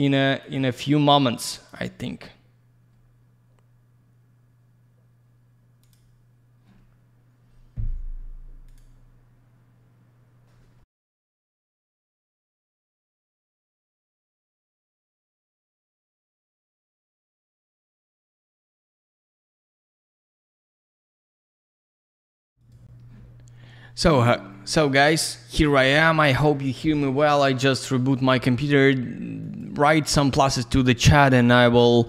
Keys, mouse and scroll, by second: 0.4 click, 0.6 click, 1.6 click, 1.7 click, 5.8 click, 5.9 click, 22.6 click, 28.1 click, 29.3 click.